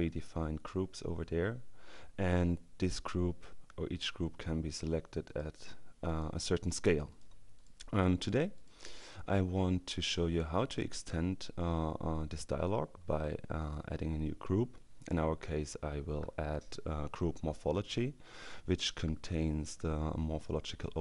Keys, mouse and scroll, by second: 5.3 click, 6.1-7.2 drag, 7.6 click.